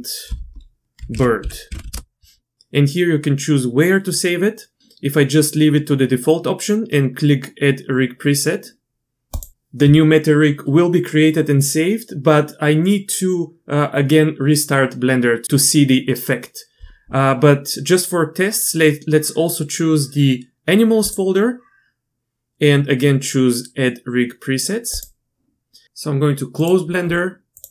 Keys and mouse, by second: 18.6-21.1 drag.